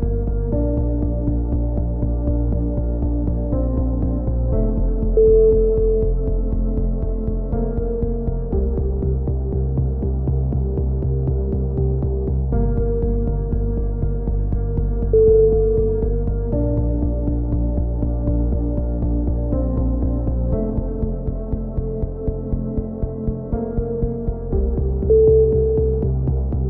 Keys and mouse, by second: 0.4 a, 0.7 z, 0.9 click, 1.7 KP_7, 2.2 z, 3.2 z, 3.8 z, 4.0 click, 5.0-6.3 right drag, 6.0 click, 7.7 right click, 8.3 click, 9.2 right click, 9.6 click, 11.0 right click, 11.5 click, 12.7-13.7 middle drag, 13.7 z, 14.0 click, 15.9 KP_7, 16.3-17.4 middle drag, 16.6 z, 17.4 click, 18.9-20.5 middle drag, 20.7 f, 21.0 a, 21.1 z, 21.3 middle click, 24.7 KP_7, 25.1 x, 25.7 z.